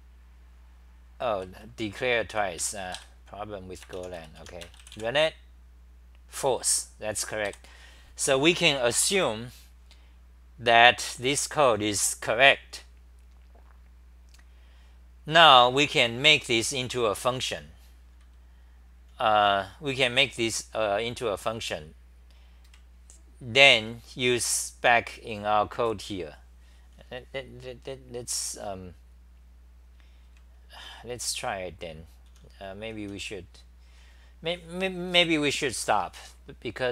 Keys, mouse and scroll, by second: 1.2-3.1 typing, 4.2 ;, 4.4 Home, 7.5 3, 22.7 ctrl+shift+Tab, 22.7 scroll up 5, 24.4-27.4 scroll down 13, 30.3 ctrl+Tab.